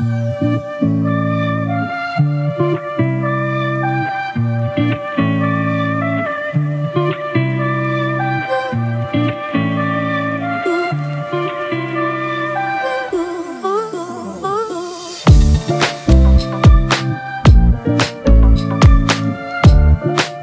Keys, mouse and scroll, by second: 0.4 typing, 6.1-7.6 typing, 10.8-11.4 scroll down 1, 11.4 typing, 15.9 typing.